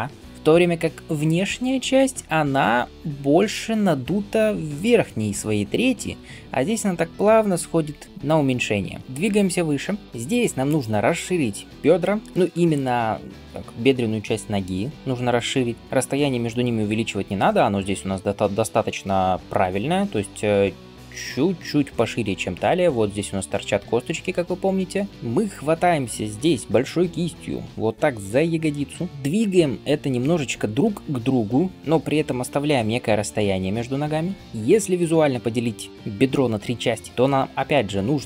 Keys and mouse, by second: 25.1-26.7 drag, 26.7-38.2 right drag, 26.7 f, 28.2-38.2 drag, 28.2-38.2 middle drag.